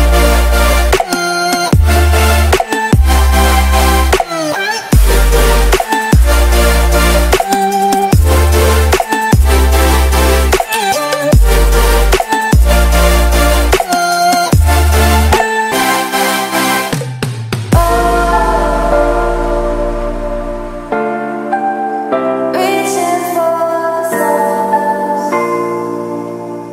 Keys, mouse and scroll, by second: 0.0-0.9 typing, 6.3 Delete, 6.5 Delete, 6.6 Delete, 6.8 Delete, 6.9 Delete, 7.0-8.7 typing, 8.9-10.7 drag, 11.9-13.1 typing, 13.7-17.7 drag, 25.3-26.7 typing.